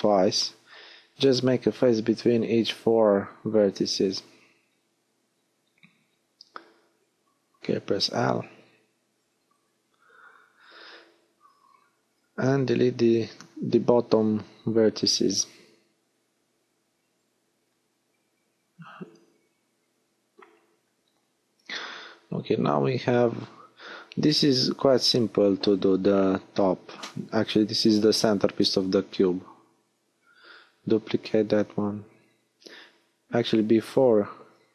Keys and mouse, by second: 0.2 f, 2.7 f, 5.4-7.6 drag, 6.6 l, 7.6 h, 7.9-9.1 middle drag, 9.3 click, 10.1 click, 10.9 x, 14.0 middle click, 14.5-17.3 drag, 16.8 x, 17.7-20.0 drag, 21.3-22.5 drag, 22.5 b, 26.9 shift+d, 28.6-34.7 drag.